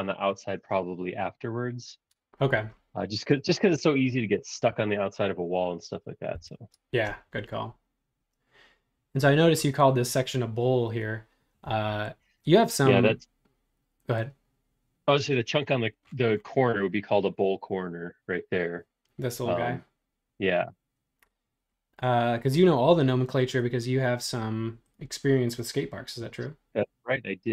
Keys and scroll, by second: 6.3 l.